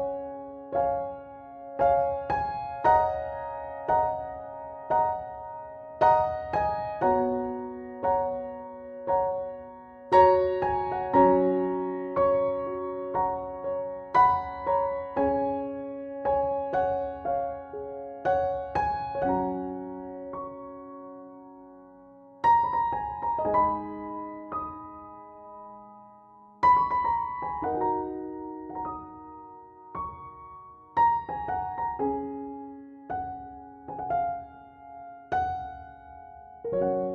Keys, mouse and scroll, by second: 1.8 Tab, 4.6 a, 8.2 e, 15.6 KP_7, 19.6 Tab, 20.2 click, 21.9 click, 27.0 click.